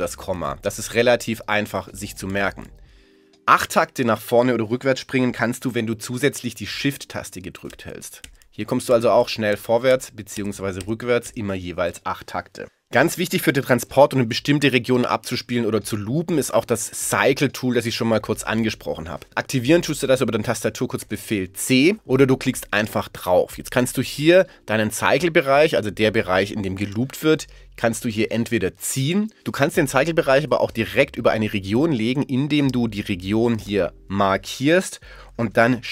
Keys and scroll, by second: 0.1 ,, 7.7 shift+., 9.5 shift+,.